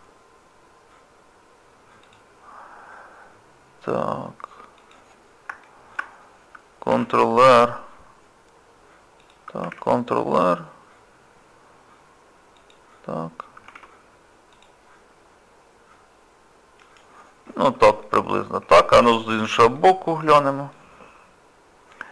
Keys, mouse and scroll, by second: 5.2 scroll down 1, 5.6 shift+middle click, 6.9 ctrl+r, 9.6 ctrl+r, 13.7 ctrl+r, 18.0 middle click, 18.6 scroll down 1, 19.0 shift+middle click, 19.8 middle click, 20.5 shift+middle click, 21.0 scroll up 1, 21.4 scroll down 1, 21.5-21.9 scroll up 4.